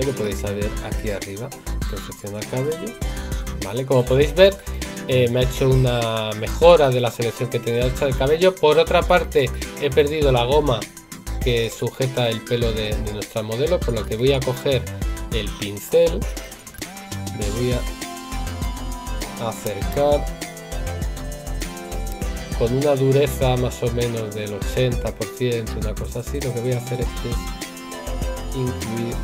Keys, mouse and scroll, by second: 19.9 right click, 22.1 right click.